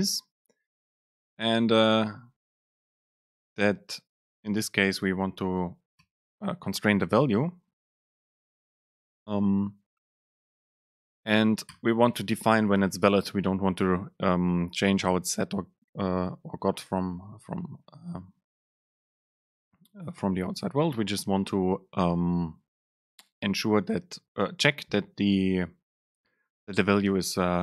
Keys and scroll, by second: 7.3 Down, 8.0 Down, 10.9 Down, 11.8 Return.